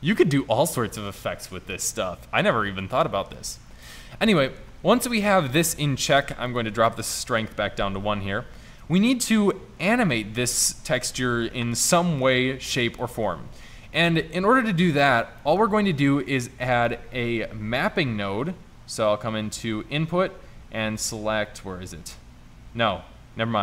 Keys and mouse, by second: 0.5 middle click, 15.3 middle drag, 16.7 shift+a.